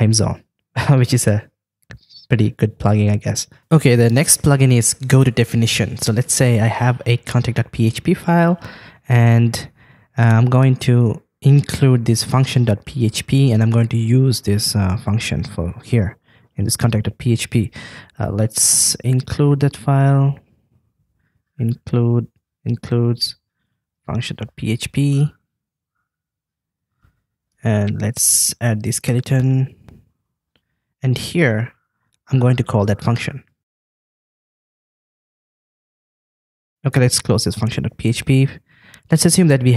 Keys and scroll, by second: 25.1 super+Right, 27.3 super+Right, 34.9 super+v, 36.7 super+s.